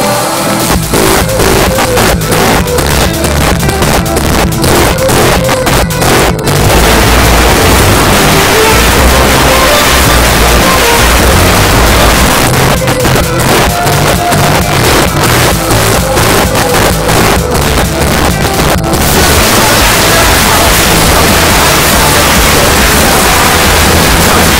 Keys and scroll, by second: 12.3 Page_Down.